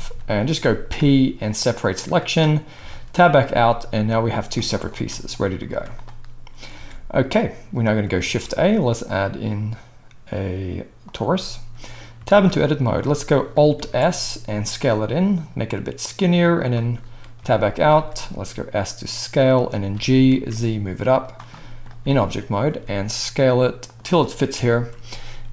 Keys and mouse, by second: 0.0 g, 0.9 p, 2.8 Tab, 3.4-4.1 middle drag, 4.1 g, 4.9 g, 5.6 z, 6.8 alt+a, 8.2 shift+a, 8.8-13.9 middle drag, 12.2 Tab, 13.8 alt+s, 14.0-25.5 middle drag, 17.4 Tab, 17.9 s, 19.9 g, 22.6 s, 24.5 KP_1.